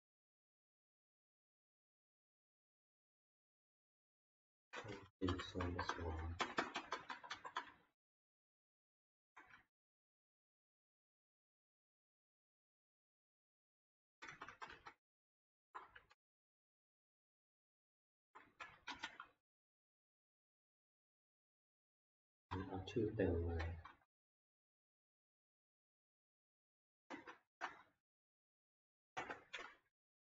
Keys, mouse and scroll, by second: 3.1 click, 3.3 click, 4.0 click, 5.6 Right, 6.1 Right, 6.4 Right, 6.6 Right, 6.7 Right, 6.9 Right, 7.1 Right, 7.3 Right, 7.5 Right, 9.2 Down, 9.5 Left, 9.9 Return, 10.0 Return, 10.1 Return, 11.2 Return, 12.0 ctrl+x, 12.5 Left, 13.2 Down, 13.8 Left, 14.0 Return, 14.3 Return, 14.5 Return, 14.7 Return, 15.6 BackSpace, 16.2 ctrl+v, 17.9 Left, 18.2 Left, 18.4 Left, 18.9 Delete, 21.7 Down, 22.3 Right, 22.5 Right, 23.5 Left, 23.8 Right, 24.3 ctrl+v, 24.5 Down, 27.1 BackSpace, 27.6 BackSpace, 29.1 BackSpace.